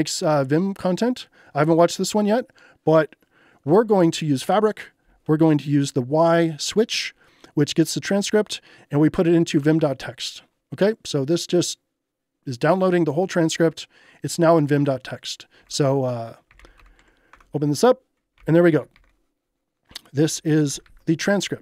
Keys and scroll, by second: 9.6 Return, 15.6-19.0 typing, 17.3 Return, 20.7 shift+z.